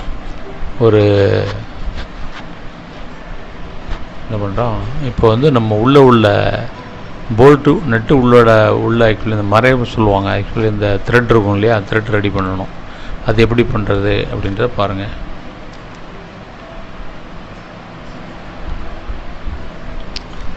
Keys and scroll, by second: 3.6 ctrl+z, 6.7 space, 12.3 space.